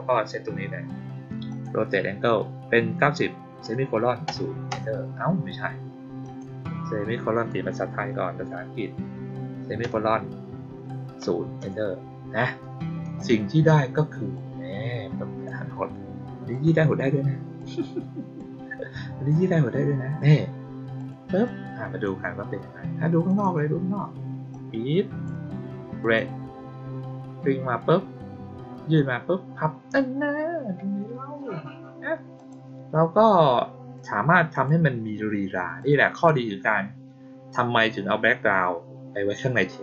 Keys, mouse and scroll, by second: 1.4 click, 6.2 click, 14.3-15.4 drag, 16.4 click, 17.5 click, 19.2 click, 20.9 click, 21.4-22.0 drag, 23.2 click, 24.4-25.2 drag, 25.9 click, 32.3 click, 34.4 click, 35.7 click.